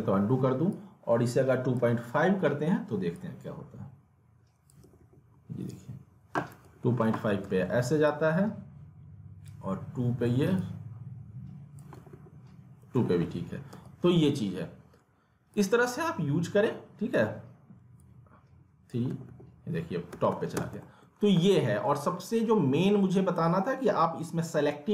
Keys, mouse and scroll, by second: 0.7-4.8 drag, 4.8 alt+w, 6.6 alt+w, 7.4 ctrl+z, 8.1-11.9 drag, 12.0 alt+w, 12.9 alt+w, 13.7 ctrl+z, 15.5-19.1 drag, 19.1 alt+w, 19.9-21.1 typing, 20.8 alt+middle click, 21.1 scroll down 1, 21.3 alt+middle click, 23.0 right click.